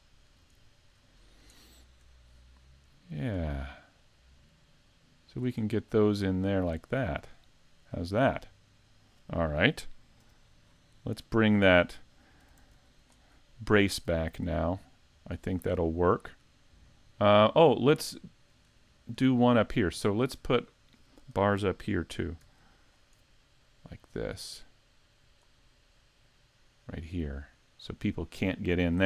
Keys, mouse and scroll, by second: 0.6 shift+middle click, 1.2-1.7 scroll up 2, 1.6 shift+middle click, 2.4 middle click, 4.0 click, 5.6 scroll down 4, 6.0 middle click, 7.0 scroll down 2, 7.5 shift+middle click, 7.9 scroll up 4, 8.3 middle click, 10.2 KP_5, 10.7-11.0 scroll down 3, 11.2 middle click, 11.7-12.5 scroll down 4, 12.6 s, 13.3-13.7 scroll up 4, 13.8 middle click, 18.2 shift+middle click, 18.7 scroll up 3, 19.3 shift+middle click, 19.8-21.4 scroll down 1, 22.4 shift+d, 23.6 click, 26.2 click.